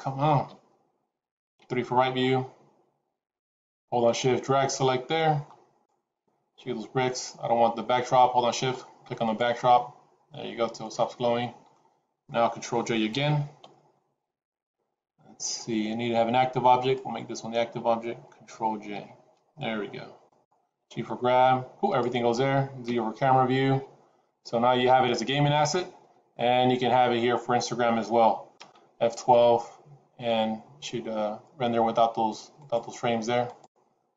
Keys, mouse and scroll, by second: 0.3 KP_1, 1.5 KP_3, 2.2-2.7 scroll up 3, 3.9 shift+click, 8.4 shift+click, 9.2 shift+click, 10.4-10.8 scroll down 3, 10.7 middle click, 13.0 ctrl+j, 16.7 shift+click, 18.9 ctrl+j, 20.1 click, 20.6 g, 22.8 KP_0, 33.4 F12.